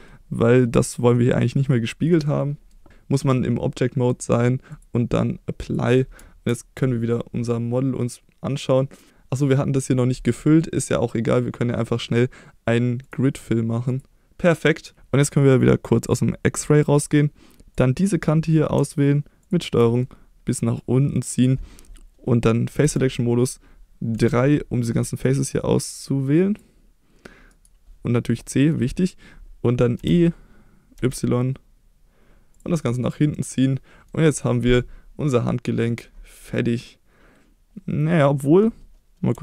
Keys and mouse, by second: 2.1 middle click, 2.9 Tab, 4.7-5.7 drag, 6.2 Tab, 7.1-9.1 middle drag, 9.3 middle click, 13.0-14.0 drag, 14.5 middle click, 16.6 click, 17.7 click, 18.1 middle click, 19.8 middle click, 20.7 click, 22.8 3, 24.1 c, 27.5 right click, 28.1-28.7 middle drag, 29.9 e, 30.9 y, 32.5 click, 33.0-34.1 middle drag, 34.3 click, 34.7-36.0 middle drag, 36.8-38.2 middle drag.